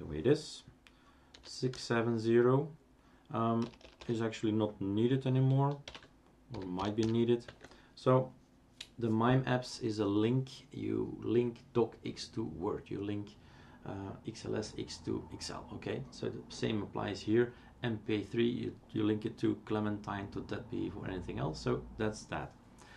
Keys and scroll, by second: 1.4-1.7 typing, 3.6 BackSpace, 3.8 BackSpace, 4.0 BackSpace, 5.8-7.5 typing, 8.7 typing.